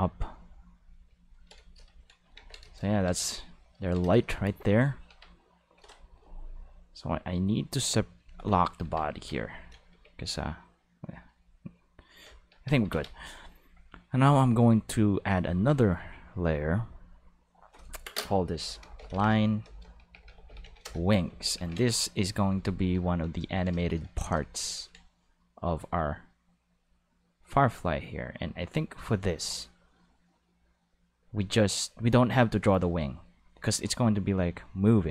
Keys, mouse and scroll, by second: 2.4 ctrl+s, 5.1 Tab, 5.8 Tab, 8.2 click, 8.8 Tab, 9.1 a, 9.9 g, 10.9 right click, 11.4 r, 12.1 right click, 12.5 Tab, 12.9 ctrl+s, 15.2 click, 16.5 click, 17.4 click, 18.6-20.6 typing, 20.8 Return, 21.6 ctrl+s.